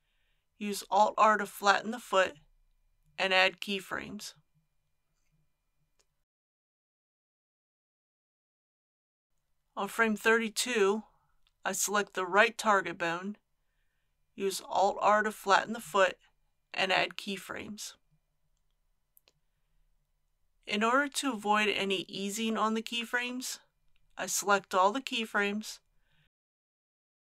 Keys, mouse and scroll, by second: 1.6 alt+r, 3.2 a, 4.1 i, 4.8-9.5 drag, 16.0 alt+r, 17.8 a, 18.8 i, 19.3 click, 22.2 scroll down 1, 23.8 middle click, 24.1-26.2 drag.